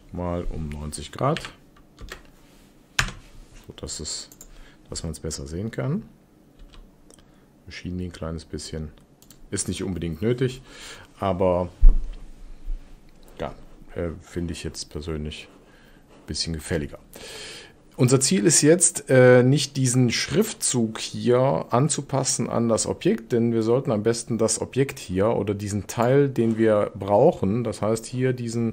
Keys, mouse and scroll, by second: 6.5 g, 25.9 click.